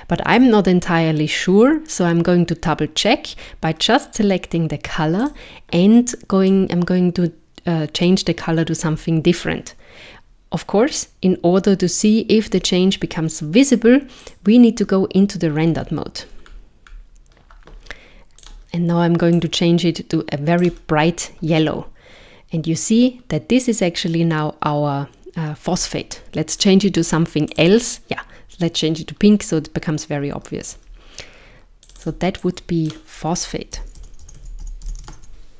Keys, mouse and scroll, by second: 0.3 click, 5.3 click, 12.5 z, 15.7 scroll up 3, 16.5-16.9 scroll down 2, 18.4 click, 26.6 click, 31.9 click, 32.0 click.